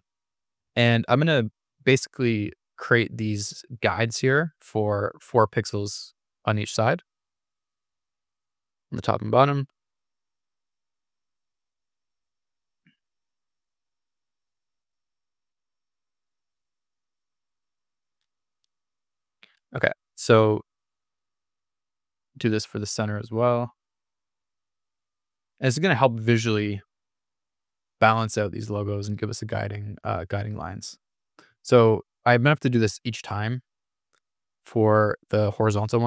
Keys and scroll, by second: 2.4 super+=, 25.9 super+-, 33.5 super+=.